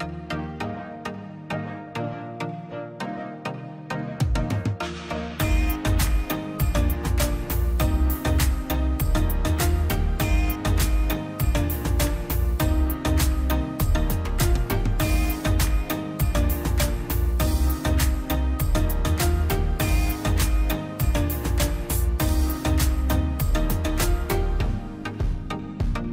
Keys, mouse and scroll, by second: 0.1 middle click, 0.3-0.8 scroll up 1, 0.8 click, 1.0-1.4 scroll down 1, 1.4-2.7 middle drag, 2.7-3.1 scroll up 1, 3.5 click, 3.7 scroll up 1, 4.0 click, 4.8 scroll up 1, 5.1-6.4 drag, 6.4 p, 6.9 click, 7.8 scroll down 1, 7.9 middle click, 8.6 space, 8.8 l, 9.0-9.3 scroll up 1, 9.3 click, 9.8-10.3 scroll down 1, 10.6 click, 11.7-12.2 scroll down 1, 12.2 middle click, 12.8-13.4 scroll up 1, 13.4 click, 14.1 scroll down 1, 14.3 middle click, 14.7 scroll up 1, 14.9 middle click, 15.3-15.6 scroll up 1, 15.6 click, 16.4 scroll down 1, 16.7-18.5 middle drag, 18.5 space, 18.7 scroll up 1, 19.1 p, 19.7 middle click, 20.3 scroll down 1, 20.5 middle click, 21.3 middle click, 21.9 middle click, 22.4 click, 23.4 scroll down 1, 23.7 middle click, 24.0 scroll up 1, 24.4 click, 25.0 scroll up 1.